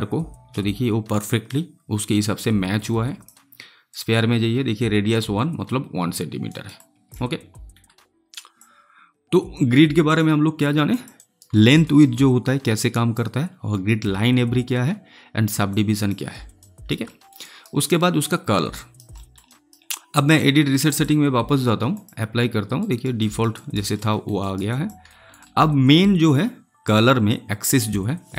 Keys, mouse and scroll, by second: 0.6-3.8 alt+drag, 6.4 alt+right click, 6.7-10.8 alt+drag, 11.1 alt+right click, 11.5 alt+middle click, 11.8 alt+right click, 12.7-15.5 drag, 15.6 click, 16.5 alt+right click, 17.0 alt+middle click, 17.4 alt+right click, 18.7 alt+right click, 19.1 alt+middle click, 19.4 alt+right click, 20.2 click, 22.7 alt+right click, 23.9 alt+middle click, 24.3 alt+right click, 24.6 alt+click, 25.0 alt+middle click, 25.3 alt+right click.